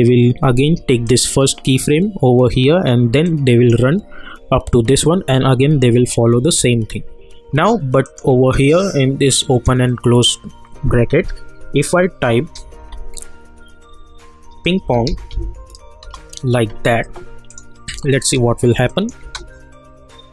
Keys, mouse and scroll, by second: 1.0 click, 3.2-8.0 drag, 12.8 ', 14.6-15.8 typing, 16.0 Return, 17.5 click, 19.2 space.